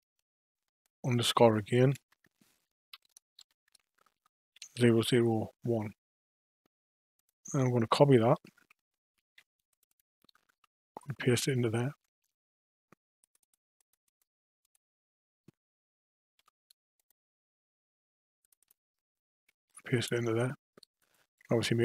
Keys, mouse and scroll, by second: 4.7 0, 7.1 click, 8.3 F2, 9.9-13.0 drag, 13.4 click, 14.1 click, 16.3 Tab, 16.9 click, 18.4 click, 18.6-21.7 drag.